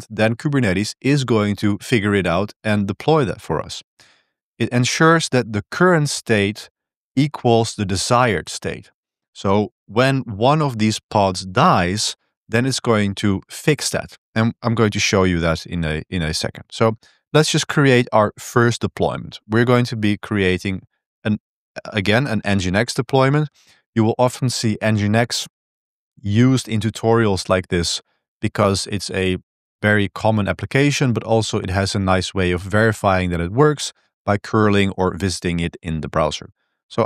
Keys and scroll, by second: 3.5 j, 4.2 h, 6.0 l, 7.1 l, 15.1-17.3 typing, 18.9-22.6 typing, 20.4 ctrl+b, 22.9 ctrl+v.